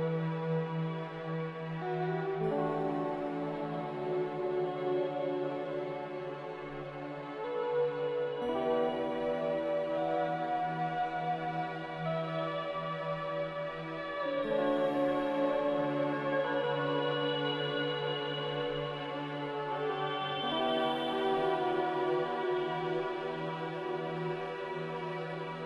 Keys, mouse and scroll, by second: 0.1-1.0 typing, 2.5 q, 8.2 z, 9.8-11.0 typing, 13.7 Return, 18.9 z, 22.0-22.8 typing.